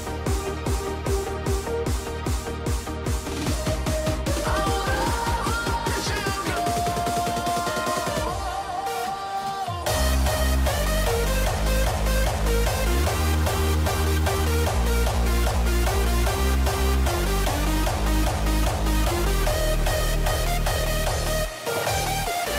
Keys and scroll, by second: 1.6 ctrl+r, 3.3 ctrl+e, 3.8 ctrl+alt+z, 4.4 ctrl+=, 7.3 ctrl+t, 8.3 ctrl+0, 13.5 ctrl+s.